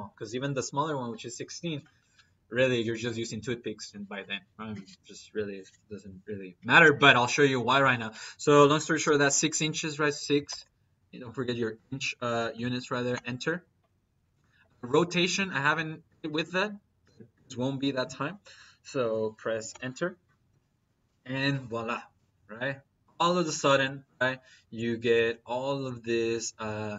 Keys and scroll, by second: 8.9 6, 10.4 shift+Left, 11.6 Left, 12.4 shift+Left, 19.5 Return.